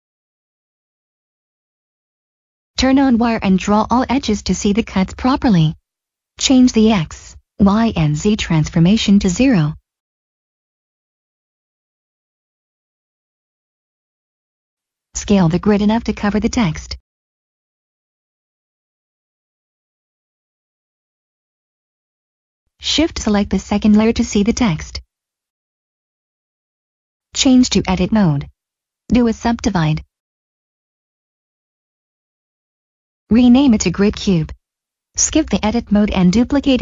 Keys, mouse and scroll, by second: 0.8 scroll down 1, 2.3 click, 3.7 middle click, 5.2 middle click, 5.8 scroll up 1, 6.8 click, 8.2 0, 9.1 click, 9.8 0, 10.3 click, 11.1 0, 12.0 Return, 13.6 middle click, 15.8 shift+middle click, 17.2 s, 18.4 typing, 20.9 click, 23.4 click, 24.4 middle click, 25.2 scroll up 1, 25.8 middle click, 25.9 Tab, 27.7 click, 30.7 Tab, 33.2 typing, 33.9 Return, 34.7 middle click, 35.5 shift+d.